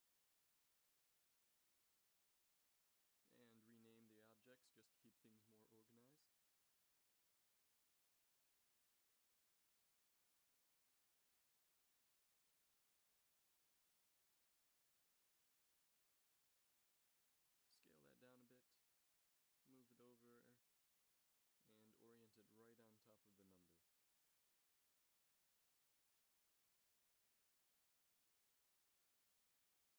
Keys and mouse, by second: 2.6-5.6 drag, 7.3-10.0 drag, 13.8 s, 16.8 click, 17.7 s, 19.7 g, 22.2 g, 25.3 s, 27.4 middle click, 27.7 a, 29.3 ctrl+s.